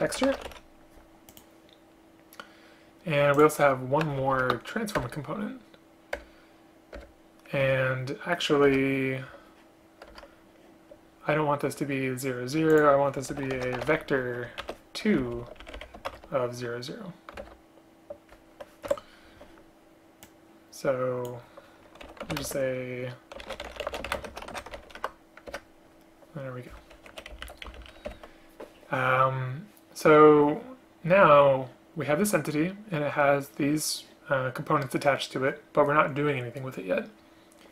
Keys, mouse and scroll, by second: 4.4 alt+Return, 5.1 Return, 6.3 Return, 7.0 Return, 8.8 Return, 10.2 Return, 15.3 ctrl+Right, 15.5 ctrl+Right, 17.5 alt+Return, 19.0 Escape, 22.5 space, 24.2 shift+space, 25.6 Return, 27.4 End, 27.4 Left, 27.5 Left, 27.7 shift+Down, 27.9 shift+Down, 28.2 Delete.